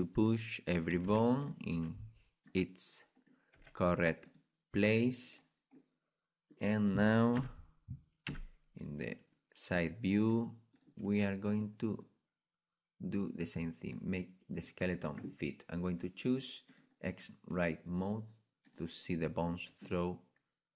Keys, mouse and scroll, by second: 1.3 c, 1.7 g, 1.9 click, 2.2 right click, 3.6 g, 4.2 click, 4.9 right click, 5.9 click, 6.2-8.3 middle drag, 7.3 KP_1, 8.3 KP_3, 9.0-10.8 middle drag, 10.8-13.8 drag, 17.6-20.7 drag, 19.0 middle click.